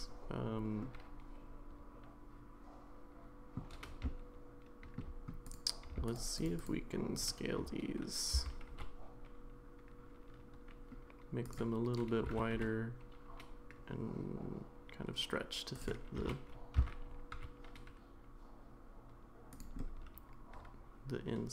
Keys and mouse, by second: 0.9-3.6 middle drag, 4.0-5.0 shift+middle drag, 5.4 click, 6.1 shift+click, 6.4-7.6 shift+drag, 8.3 s, 12.2 g, 16.2 g, 19.8-21.5 middle drag.